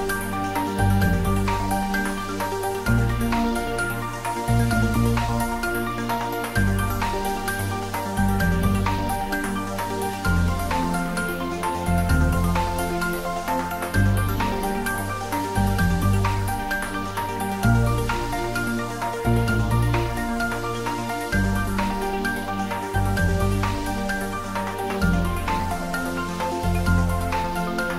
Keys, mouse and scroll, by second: 0.0 shift+click, 2.1 ctrl+middle click, 2.6 shift+middle click, 4.3 ctrl+middle click, 4.7-10.5 shift+middle drag, 10.5 Tab, 11.1 ctrl+a, 11.7 click, 11.9 Tab, 12.5 ctrl+b, 13.6-13.9 scroll up 1, 15.3 click, 15.4 Tab, 15.7-17.0 middle drag, 17.0 ctrl+s, 17.6 click, 18.1 ctrl+middle click, 19.0-20.4 ctrl+middle drag, 20.1-21.0 typing, 22.0 click, 22.2-23.1 typing, 25.9 Down, 26.2 click, 26.5-27.4 typing, 27.6 Down.